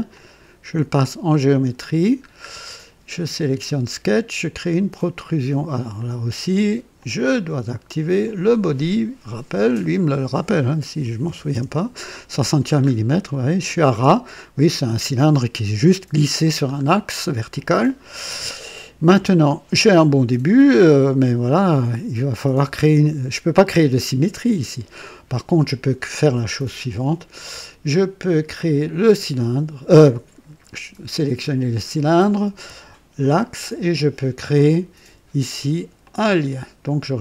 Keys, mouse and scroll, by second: 0.0 click, 1.4 click, 2.2 scroll down 1, 4.4 click, 5.9 click, 6.9 click, 8.2 click, 9.4 click, 10.9-11.5 typing, 11.4 Return, 12.7 scroll up 1, 16.4-16.8 scroll down 2, 19.2-20.9 drag, 28.5 click, 33.1 ctrl+click, 35.9 click, 36.8 scroll down 2.